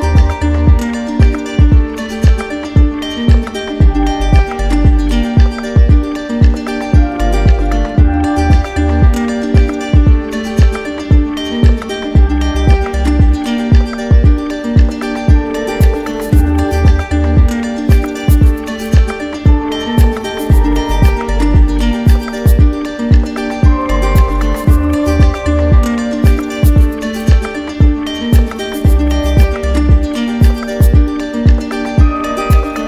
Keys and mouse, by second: 0.1 shift+click, 1.2 right click, 2.0 alt+right click, 3.5 right click, 4.2 right click, 5.6 click, 6.5 shift+right click, 8.8 shift+right click, 9.5 right click, 13.1-17.7 right drag, 18.1 ctrl+click, 20.1 right click, 20.8 click, 21.5 click, 22.6 ctrl+click, 25.3 z, 29.2 right click, 30.5 click.